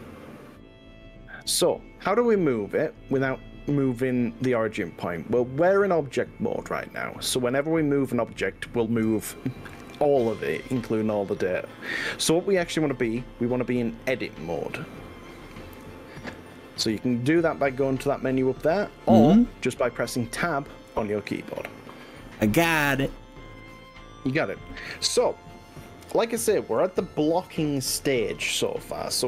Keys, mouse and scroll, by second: 14.9-16.9 drag, 17.3 click, 21.1 Tab.